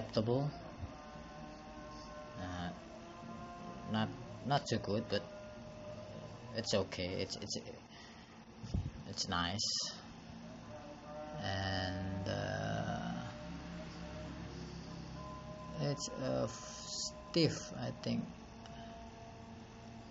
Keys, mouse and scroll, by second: 9.1 click, 9.9 click.